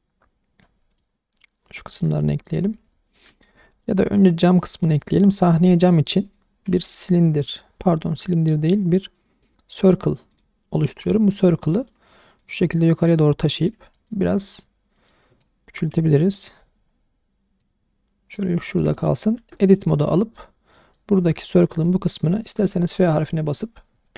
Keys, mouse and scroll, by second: 1.9 scroll down 2, 2.0-2.4 alt+middle drag, 3.4 shift+middle drag, 3.6 middle drag, 4.1 click, 4.7 shift+middle drag, 5.0 middle click, 5.3 click, 5.6-6.2 scroll down 1, 6.2 click, 6.8 shift+a, 10.8-11.1 middle drag, 11.7 middle click, 12.4 click, 13.9 middle click, 15.0 middle drag, 15.3 scroll up 1, 15.9 s, 16.3 click, 16.9-17.6 scroll up 1, 17.6 click, 18.7 shift+middle click, 18.9 middle click, 19.4 Tab, 20.7 middle click, 21.2 2, 21.6 alt+click, 22.6 f.